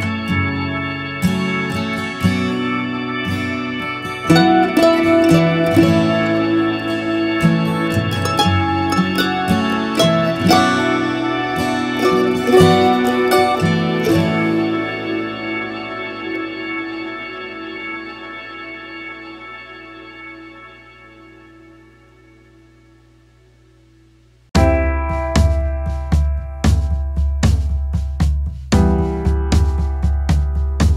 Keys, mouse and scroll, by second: 1.2 ctrl+z, 9.6 alt+space.